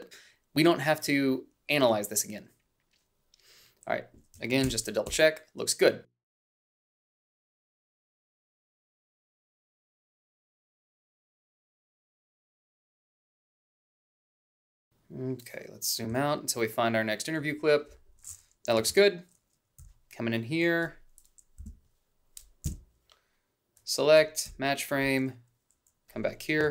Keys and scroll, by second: 4.5 ctrl+b, 6.4 h, 7.0 a, 8.0-12.9 typing, 16.1 h, 17.3 a, 18.7 =, 19.7 h, 20.6 a, 21.5 Up, 22.6 Up, 24.4 f.